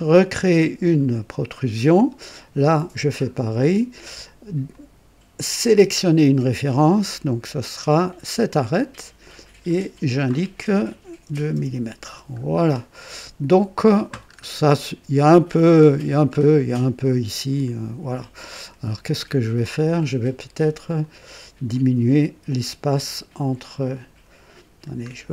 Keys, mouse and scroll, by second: 4.7 click, 5.7 click, 8.0 click, 9.6 click, 11.2 KP_2, 11.5 Return, 13.0-14.0 drag, 14.3-14.6 scroll up 1, 14.8-17.5 drag, 18.3-19.7 drag, 21.0 click, 21.7 click, 23.6 click.